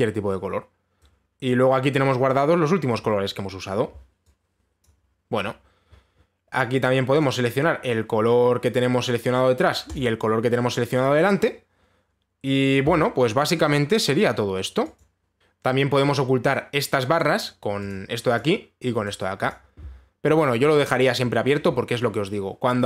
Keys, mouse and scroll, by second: 2.1 click, 5.4 click, 7.8 click, 10.5 click, 15.4 click, 15.7 click, 17.8 click, 18.5 click, 19.0 click, 19.6 click, 20.1 click.